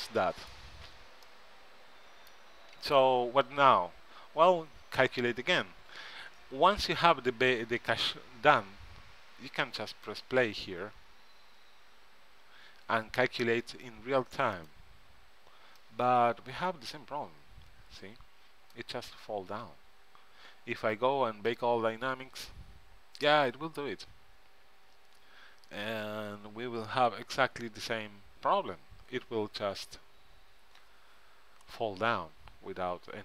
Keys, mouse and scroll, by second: 0.2-3.1 middle drag, 10.1-11.8 drag, 14.8-16.5 drag, 15.9-17.6 right drag, 21.6-33.2 drag.